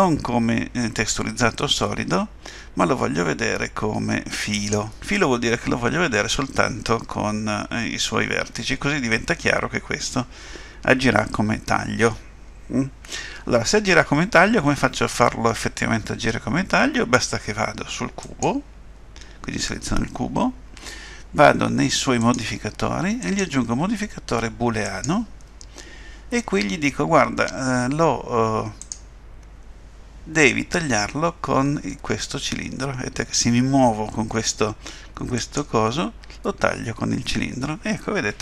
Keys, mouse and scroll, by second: 8.5 middle click, 18.2 click, 22.2 click, 23.2 click, 28.8 click.